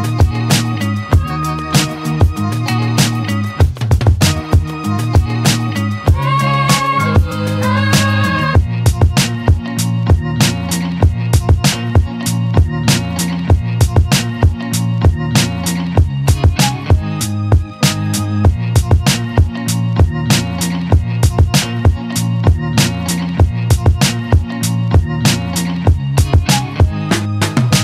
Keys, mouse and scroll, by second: 0.6 ctrl+click, 1.1 alt+middle click, 1.7 shift+click, 2.0 shift+click, 3.1 shift+click, 3.5 alt+middle click, 4.2 shift+click, 4.8 alt+middle click, 5.1 shift+click, 6.0 shift+click, 6.4 alt+middle click, 7.2 shift+click, 7.9 shift+click, 8.5 alt+middle click, 8.9 alt+click, 9.5 alt+right click, 9.8-10.8 alt+drag, 10.8 alt+middle click, 11.0 alt+right click, 11.3 alt+click, 11.8 z, 13.4-15.5 drag, 15.5 Tab, 16.0-16.3 alt+right drag, 16.3 click, 16.4-18.2 alt+drag, 18.2 alt+middle drag, 18.4 alt+right drag, 18.7-19.1 alt+drag, 19.1 alt+middle drag, 19.3-20.7 alt+drag, 21.1 click, 21.4 click, 22.3 drag, 22.9-23.2 scroll down 1, 24.5 click.